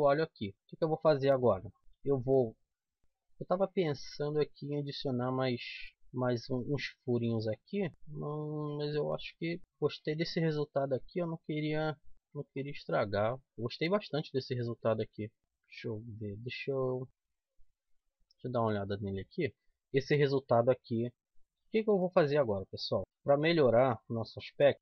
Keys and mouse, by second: 2.7 KP_7, 3.0 z, 6.8 middle click, 9.1 middle click, 12.1 right click, 12.5-13.8 drag, 13.1-14.1 right drag, 15.2 middle click, 17.1 z, 19.5 KP_7, 21.1 z, 22.1-23.5 middle drag, 24.2 a, 24.7 c.